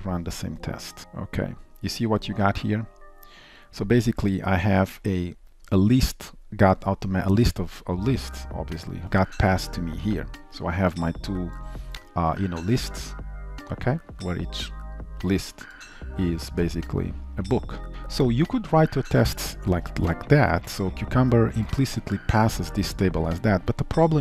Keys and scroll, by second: 20.1 ctrl+shift+F12, 24.0 Escape.